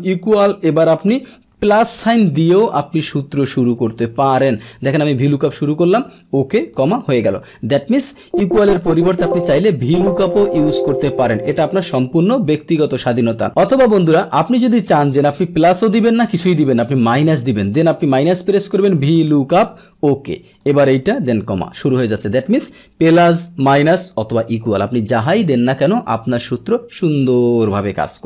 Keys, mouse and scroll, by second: 0.1 click, 4.9 Tab, 6.0 click, 8.2 BackSpace, 8.4 BackSpace, 10.3 click, 10.6 BackSpace, 11.4 BackSpace, 12.4 Escape, 14.0 click, 14.6 click, 19.8 Tab, 20.6 click, 23.0 BackSpace, 24.4 click, 25.3 click.